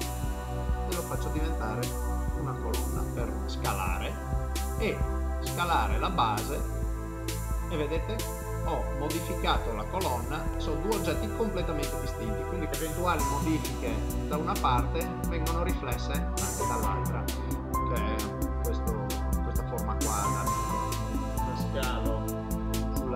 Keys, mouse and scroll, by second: 0.3 ctrl+middle click, 1.3 s, 3.7 s, 7.6 middle click, 9.5 ctrl+middle click, 10.3 middle click, 12.6 Tab, 12.6 click, 13.2 g, 14.6 middle click, 15.4 ctrl+middle click, 16.5 Tab, 16.9 middle click, 20.9 middle click, 20.9 s, 22.6 s.